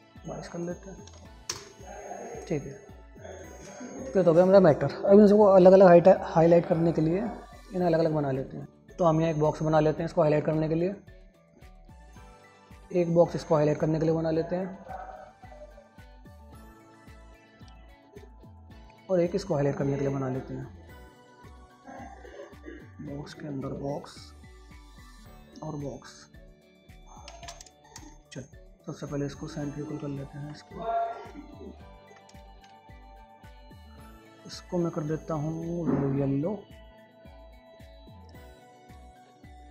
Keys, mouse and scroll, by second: 4.6 click, 6.0 click, 9.8-20.9 drag, 22.7-27.7 drag, 27.7 ctrl+space, 28.1 shift+click, 28.5 c, 28.7 click, 33.1 typing, 33.6 click, 37.5 click, 37.9-39.7 alt+drag.